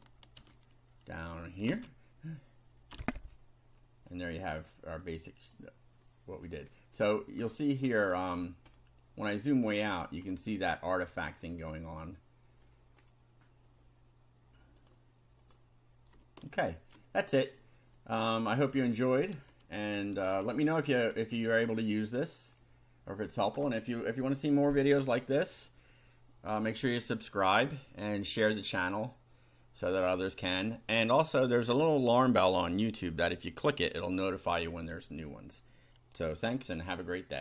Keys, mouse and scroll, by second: 0.4 ctrl+z, 1.2 click, 1.7 ctrl+v, 2.9 F5, 3.3 scroll down 2, 3.8 scroll down 2, 4.1 click, 5.1 click, 6.1 click, 7.0 scroll up 1, 7.6-8.3 shift+right drag, 8.7 scroll down 1, 9.7 scroll up 2, 10.3 scroll down 2, 11.4-11.7 scroll down 2, 12.7-13.3 scroll up 4, 14.8 click, 15.4 click, 16.5-17.1 shift+right drag, 18.0-18.9 drag, 19.7 shift+middle click, 20.5 ctrl+shift+right click, 22.5 scroll down 2.